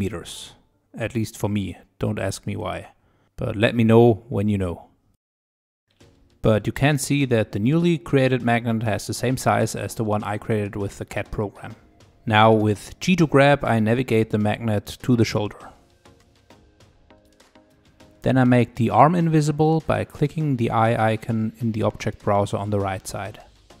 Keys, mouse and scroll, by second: 0.6 click, 2.0-5.0 drag, 5.6 click, 6.9-8.1 drag, 9.0 click, 9.8-12.0 middle drag, 12.6 g, 15.8-16.9 shift+middle drag, 16.9 g, 17.3 scroll down 2, 17.3 middle click, 17.7 g, 18.2 scroll up 3, 18.4 shift+middle click, 18.7 click, 21.6 click, 22.5 click, 22.8 middle click, 23.3-23.8 scroll up 3.